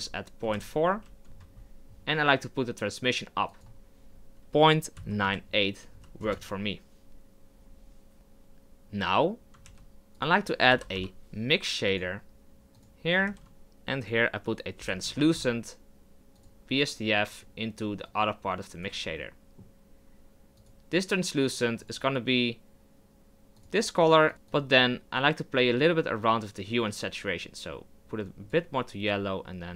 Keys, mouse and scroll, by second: 1.3-6.5 drag, 18.9 click, 19.1-23.5 middle drag, 24.3 click.